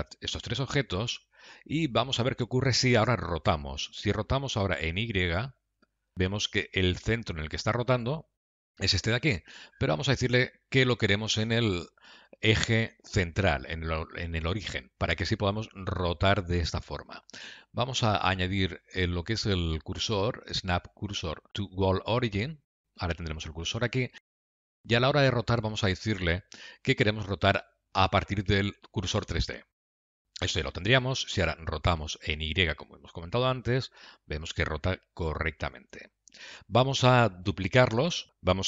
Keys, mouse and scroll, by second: 19.7 click, 25.9 click.